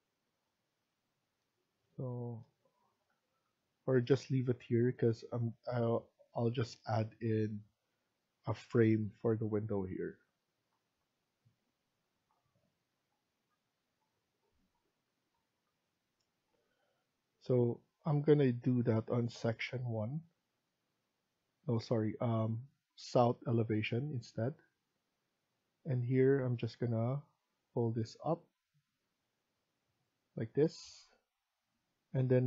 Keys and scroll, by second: 30.5 Escape, 30.8 Escape.